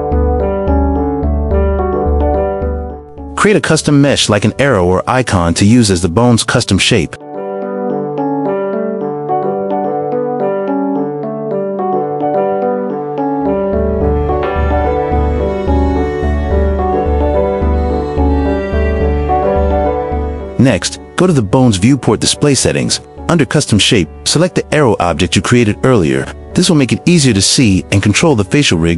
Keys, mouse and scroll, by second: 1.4 q, 2.3-2.8 shift+middle drag, 3.1 shift+middle click, 3.8-8.2 typing, 4.1 Tab, 5.3 right click, 6.6 middle click, 7.7 click, 7.8 middle click, 8.0 alt+x, 8.0 click, 8.2 middle click, 8.6 click, 9.3 k, 10.1 Return, 10.8 click, 10.9 alt+x, 11.0 click, 11.4-16.7 typing, 12.0 click, 12.8 click, 13.3 shift+middle click, 13.7 click, 15.0 click, 16.0 click, 16.8 right click, 17.1-19.6 right drag, 19.6 s, 20.1 Tab, 22.2-23.1 drag, 26.0-26.3 middle drag, 27.0-27.4 middle drag, 28.4 click.